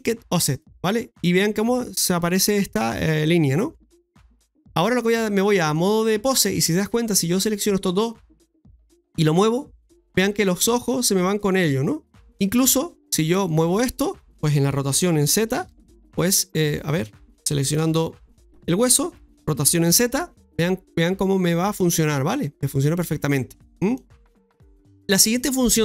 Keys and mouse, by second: 5.1 click, 7.0 right click, 7.7 shift+right click, 12.4 middle click, 13.3-14.9 typing, 13.5 right click, 13.7 middle click, 17.0 ctrl+z, 17.7 shift+s, 19.3 r, 24.7 ctrl+z, 25.6 middle click.